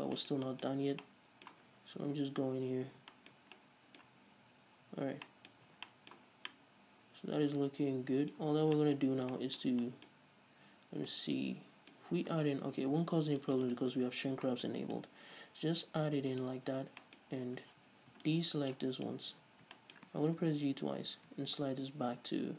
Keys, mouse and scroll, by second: 0.1-0.4 scroll up 1, 0.9-1.2 scroll up 1, 1.9-2.3 scroll down 2, 2.3 Tab, 2.5-3.4 scroll up 2, 5.2 scroll down 2, 5.9 Tab, 6.5 scroll down 2, 8.7 scroll up 2, 9.2-9.6 scroll up 2, 12.9 ctrl+r, 14.0 right click, 14.3-14.7 scroll up 2, 16.6 click, 17.2-18.5 middle drag, 17.7 scroll down 2, 17.9 z, 18.5 ctrl+click, 19.1-19.5 scroll up 2, 19.5-22.5 middle drag, 19.5 z, 20.5 g.